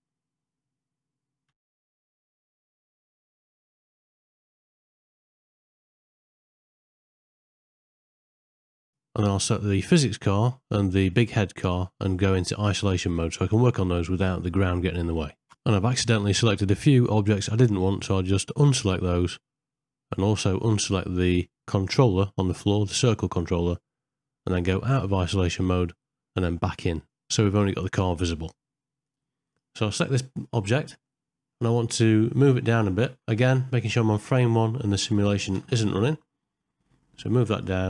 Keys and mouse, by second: 1.0 ctrl+middle click, 1.4 shift+middle click, 1.9 click, 2.0 middle click, 2.3 shift+middle click, 3.1 shift+s, 3.9 click, 4.1 click, 4.6 shift+click, 4.9 shift+s, 6.0 shift+middle click, 6.2 ctrl+middle click, 7.2 click, 8.1 KP_1, 9.6 click, 12.9 ctrl+i, 14.5 KP_Divide, 27.0 KP_Divide, 29.0 click, 30.3 ctrl+middle click, 31.1 shift+middle click, 33.4 shift+Left, 35.5 g.